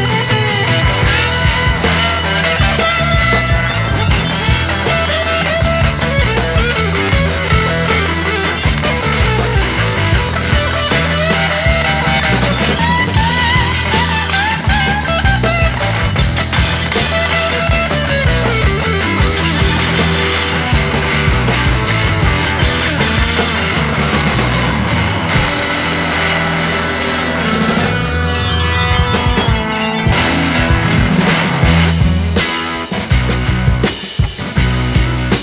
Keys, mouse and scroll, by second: 0.4-0.7 scroll up 1, 0.7 shift+a, 2.4 KP_1, 2.7-4.0 middle drag, 2.7-4.0 scroll up 3, 4.0 g, 5.6 middle click, 5.6-6.0 scroll up 6, 6.0-6.8 scroll down 7, 6.3 middle click, 6.8 KP_0, 9.4 s, 11.4-12.6 scroll down 4, 12.6 click, 13.1-13.4 scroll up 3, 15.6 click, 17.7-21.7 drag, 21.7-22.3 scroll down 5, 22.3 click, 22.8-24.6 drag, 24.6-25.1 scroll down 6, 25.4-26.1 drag, 26.1 scroll down 1, 26.2-30.7 drag, 31.2 click, 34.3 click.